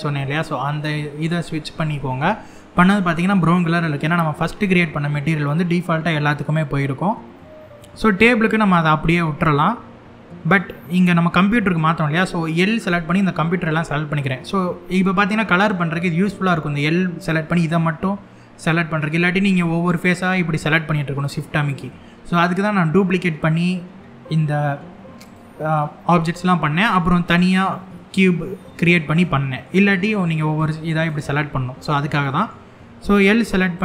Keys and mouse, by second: 7.0 middle click, 8.5 middle click, 10.2 middle click, 12.5 l, 19.1 click, 19.6 click, 20.8 shift+click, 21.3 shift+click, 24.9 click, 26.3 middle click, 27.8 middle click, 28.9 middle click, 30.2 click, 30.6 click, 31.9 middle click, 33.4 click.